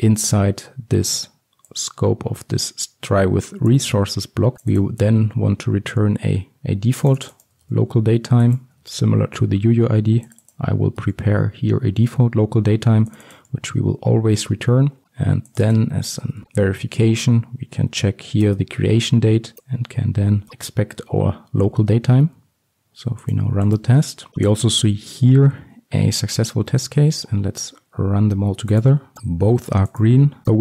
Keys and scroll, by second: 8.9 ctrl+c, 9.3 ctrl+v, 12.2 ctrl+c, 13.5 ctrl+v, 18.5 Return, 20.5 ctrl+v, 21.1 ctrl+alt+l, 21.8 ctrl+s.